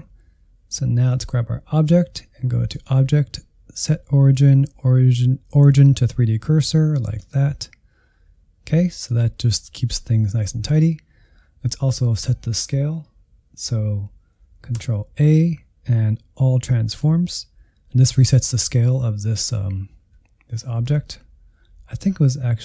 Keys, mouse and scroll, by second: 1.0-13.7 drag, 14.7 ctrl+a.